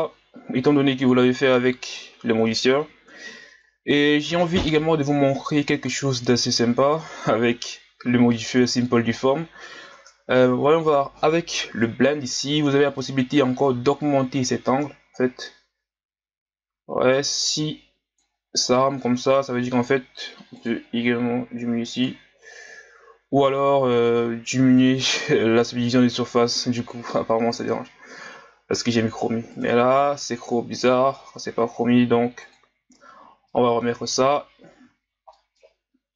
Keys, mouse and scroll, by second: 1.1 right click, 1.8-4.8 scroll up 2, 5.7-8.7 drag, 13.0-16.4 drag, 19.1-20.7 middle drag, 20.7 click, 22.4-33.5 drag, 33.5 middle click, 34.4 scroll up 1, 35.0 scroll down 1, 35.3-36.1 middle drag.